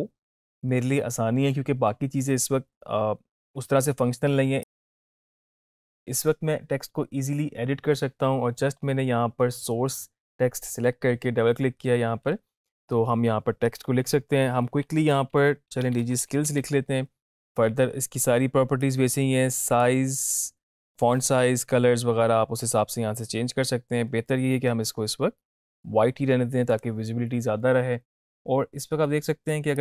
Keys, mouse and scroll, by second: 4.7 click, 14.4 shift+Num_Lock, 14.7-17.1 typing, 17.7 ctrl+a, 19.0-20.2 drag.